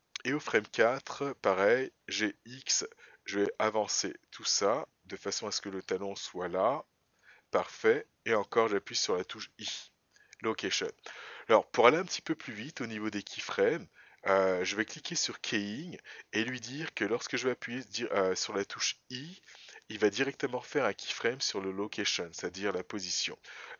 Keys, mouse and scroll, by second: 2.0 g, 15.3 click.